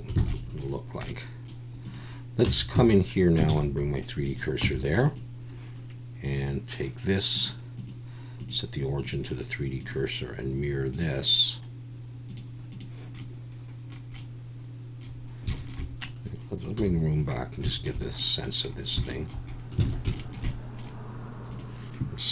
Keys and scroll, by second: 0.2 alt+a, 2.4 Tab, 2.7 a, 3.5 shift+s, 4.6 Tab, 16.8 /, 19.8 alt+a.